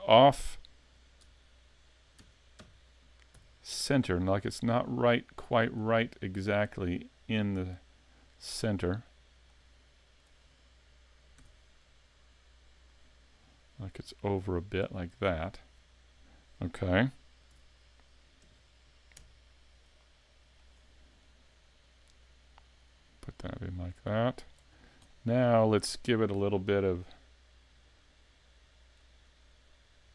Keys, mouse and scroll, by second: 1.3 KP_3, 2.2 KP_1, 2.6 KP_5, 3.4 z, 3.7 scroll up 4, 4.1 shift+middle click, 5.0 click, 7.2 scroll down 3, 9.0 click, 11.4 s, 12.9 click, 13.8 click, 17.6 z, 18.4 KP_5, 20.0 middle click, 20.8 scroll up 2, 21.5 click, 24.7 scroll down 2, 25.1 middle click, 25.6 scroll up 3, 25.9 shift+middle click, 29.0 click.